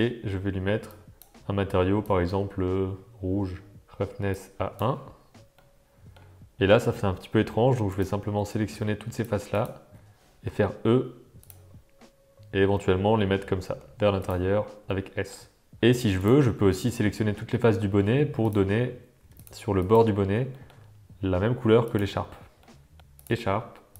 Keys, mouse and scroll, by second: 3.8 Tab, 4.3 click, 5.5-6.1 middle drag, 7.0 Tab, 7.8 click, 9.0 shift+click, 9.5 shift+click, 10.4 e, 12.7 s, 14.9 middle click, 16.1 click, 17.7 shift+click, 18.0 middle click, 18.4 click, 20.5 middle click, 21.9 shift+click, 22.6 middle click, 23.1 click.